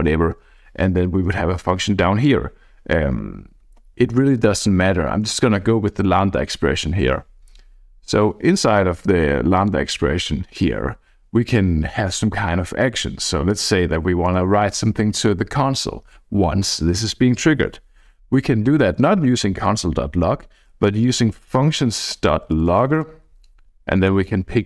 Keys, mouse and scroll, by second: 1.7 click, 3.6 Escape, 4.3 ctrl+z, 8.0 Up, 9.5 click, 13.5 f, 14.3 BackSpace, 20.8-24.0 typing, 24.6 Down.